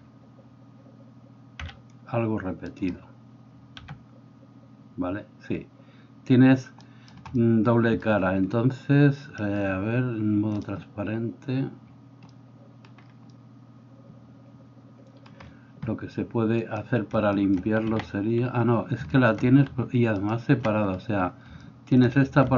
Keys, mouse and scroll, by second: 1.6 c, 2.8-10.6 middle drag, 3.9 g, 10.6-22.5 drag, 17.9 a, 20.2 middle click, 20.2 right click.